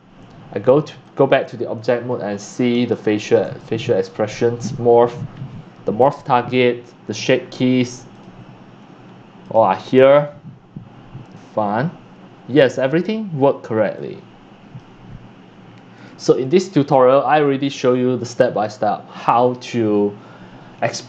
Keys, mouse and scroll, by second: 1.0 click, 1.7 click, 2.2 scroll, 2.9 scroll, 3.1-4.2 shift+middle drag, 4.4-6.9 drag, 6.9-8.3 middle drag, 8.3-9.1 drag, 10.0 drag, 10.2-12.6 drag, 12.6 middle click, 13.0-14.9 drag, 15.9 click, 16.1 click, 21.0 click.